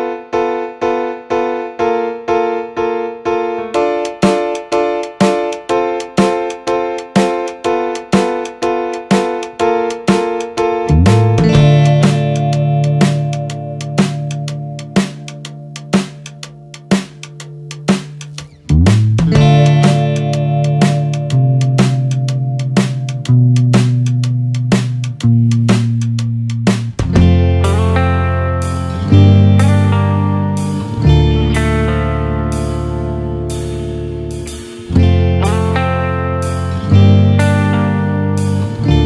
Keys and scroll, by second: 6.3 Return, 15.9 ctrl+=, 16.3 ctrl+space, 16.6 ctrl+=, 29.8 ctrl+-, 30.2 ctrl+0.